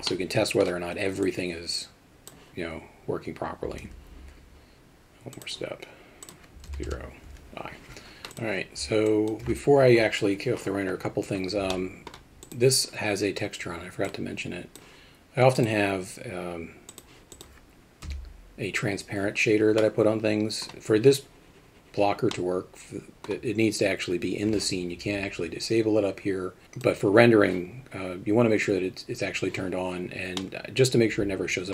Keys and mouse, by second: 0.2 middle click, 2.0-8.8 drag, 9.1 alt+middle click, 11.7-12.1 middle drag, 14.1 click, 17.3 click, 18.0 Home, 19.8-20.6 middle drag, 22.3-23.3 middle drag, 26.6 click, 30.4-31.7 middle drag.